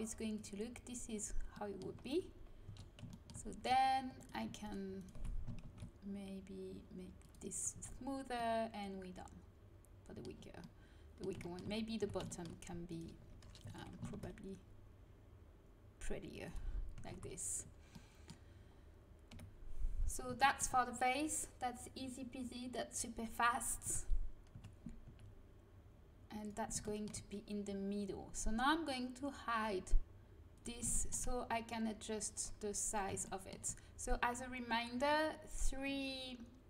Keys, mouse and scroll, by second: 0.3-2.2 drag, 2.6 Tab, 5.6 ctrl+b, 7.6 a, 7.7 Tab, 12.0 Tab, 12.8-15.3 middle drag, 14.1 ctrl+b, 16.9 a, 17.0 Tab, 19.3 KP_1, 23.8 Tab, 24.5 a, 25.0 g.